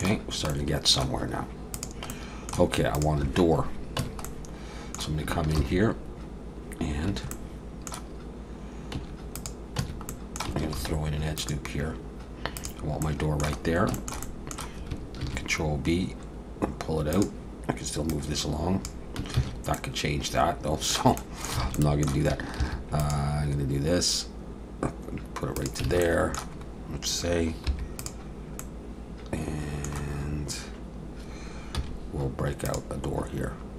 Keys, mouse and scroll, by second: 0.2-0.5 scroll down 2, 0.5 middle click, 1.8 click, 2.1 middle click, 2.9 click, 4.0 Tab, 4.2 middle click, 5.6 ctrl+r, 7.3 middle click, 8.9 Tab, 9.3 click, 9.8 Tab, 10.1 middle click, 10.7 ctrl+r, 13.0 middle click, 13.6 scroll down 1, 13.9 shift+middle click, 14.2 middle click, 15.2 ctrl+b, 18.1 click, 19.4 ctrl+z, 19.7 middle click, 21.2 middle click, 21.6 alt+a, 21.7 middle click, 22.6 ctrl+r, 25.9 alt+a, 26.0 middle click, 26.6-27.0 scroll up 1, 27.7 3, 28.0 click, 28.6 middle click, 31.7 x.